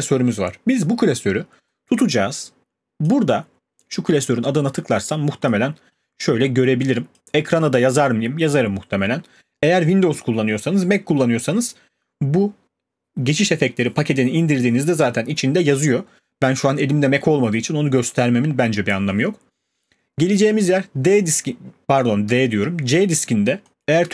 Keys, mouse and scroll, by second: 3.0 click, 4.2 click, 5.5 click, 7.2 click, 7.6 click.